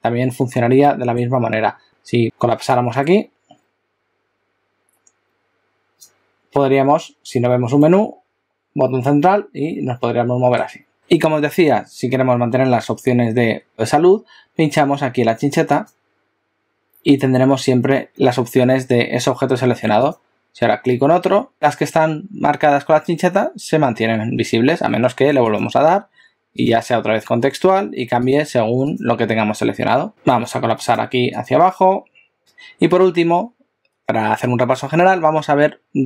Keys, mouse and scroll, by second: 0.8 middle click, 2.7 click, 7.9 middle click, 15.7 click, 20.0 click, 21.5 click, 25.7 click, 26.8 click, 29.0 click, 30.1 right click, 30.3 right click, 32.4 click.